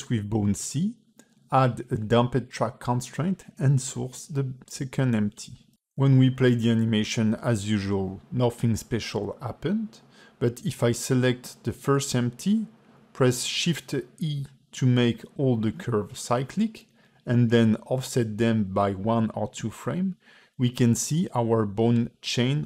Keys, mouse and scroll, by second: 1.4 click, 2.4 click, 4.1 click, 6.5 space, 7.9-8.3 scroll down 3, 9.1 KP_3, 10.0 space, 10.9 click, 11.4 click, 12.1 ctrl+Tab, 12.2 click, 13.0 a, 14.2 a, 14.4 KP_Decimal, 15.0-15.4 scroll down 3, 16.0 shift+e, 17.4 g, 22.1 click.